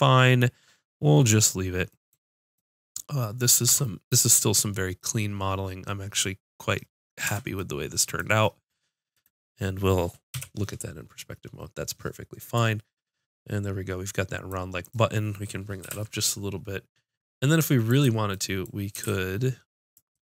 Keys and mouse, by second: 1.7-3.2 middle drag, 3.7 Tab, 7.3 Tab, 10.4 KP_5, 14.8 click, 15.8 g, 19.0 click, 19.0 g, 20.0 click.